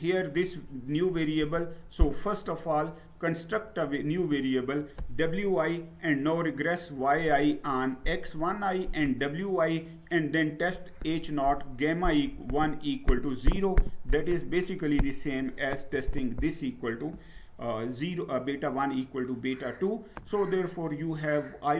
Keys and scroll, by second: 18.1 Down.